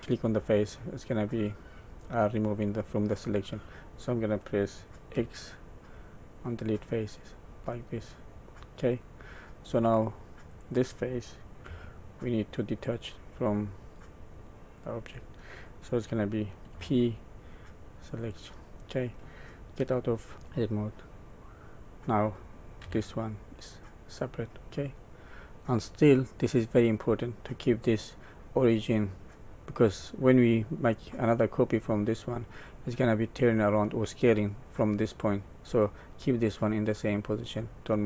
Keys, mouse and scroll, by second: 0.0 middle click, 5.1 x, 7.3 middle click, 10.5 click, 12.7 shift+click, 13.8 shift+click, 14.6 shift+click, 16.7 p, 19.7 Tab, 20.3 middle click, 21.2 click, 22.8 g, 25.6 middle click, 37.4 middle click.